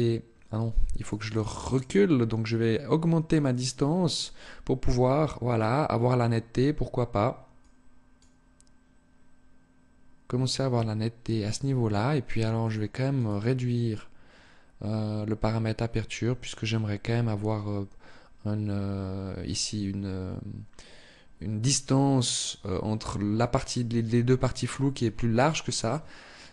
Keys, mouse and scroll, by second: 0.3 click, 0.4 click, 0.9 click, 1.0 click, 1.4 click, 1.8 click, 7.0 click, 12.0 click, 12.4 click.